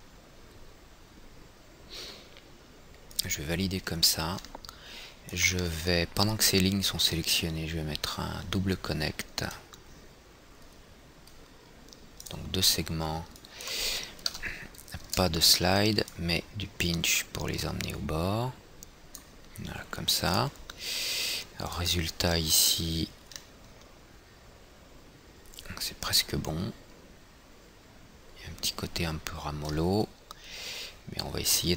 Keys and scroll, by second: 14.9 KP_0, 15.6 Tab.